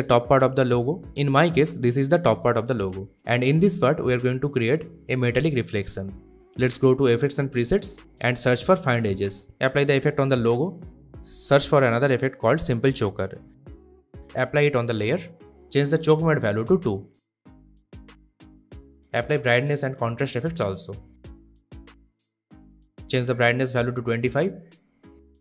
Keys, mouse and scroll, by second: 0.2-1.0 drag, 1.8 space, 2.2-3.0 click, 2.2 space, 4.9 click, 7.9-8.9 typing, 9.7 click, 12.4 click, 13.3 BackSpace, 14.3 click, 17.1 2, 17.6 Return, 19.0 click, 19.5-21.0 typing, 22.1 click, 24.2-24.6 typing, 24.8 Return.